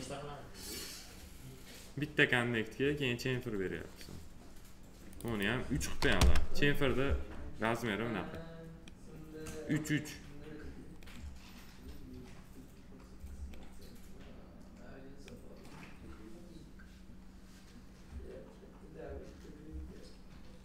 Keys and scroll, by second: 5.9 3, 6.1 Return.